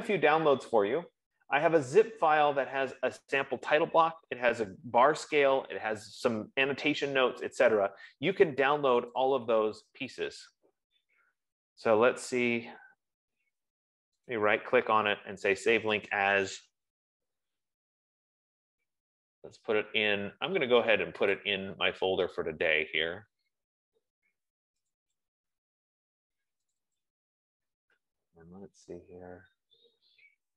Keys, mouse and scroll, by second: 9.5 click, 14.7 right click, 16.4 click, 21.7 click, 25.3 click, 25.5 click, 27.1 click, 27.3 click, 28.6-29.7 scroll down 2.